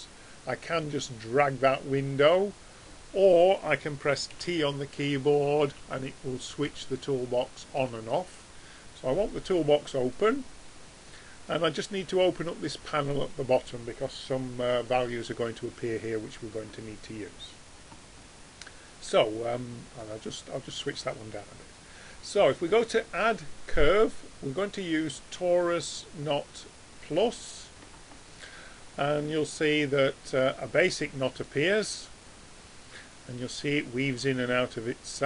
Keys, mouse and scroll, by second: 4.3 t, 5.7 t, 6.6 t, 7.8 t, 9.6-11.5 drag, 11.6-13.5 drag, 20.0-21.8 drag, 22.7-24.5 drag.